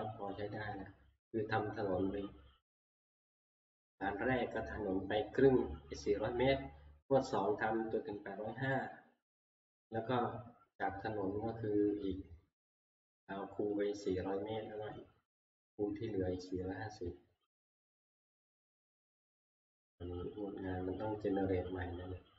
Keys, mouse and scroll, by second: 17.9 click, 18.3 ctrl+Page_Up.